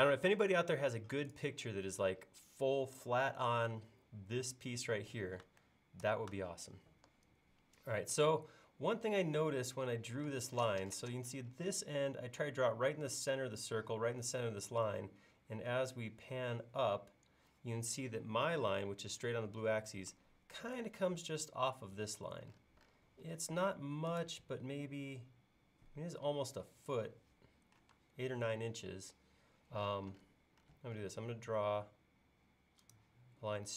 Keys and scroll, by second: 6.1 super+Tab, 10.4 space, 23.3 l, 28.0 space, 31.8 i.